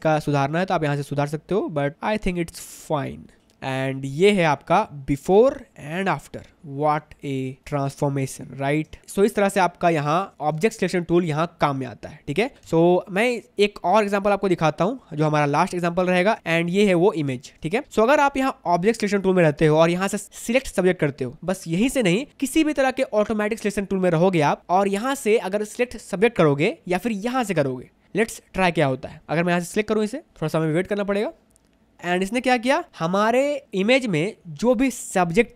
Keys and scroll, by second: 6.6 v, 7.6 space, 10.3 space, 12.8 v, 16.3 space.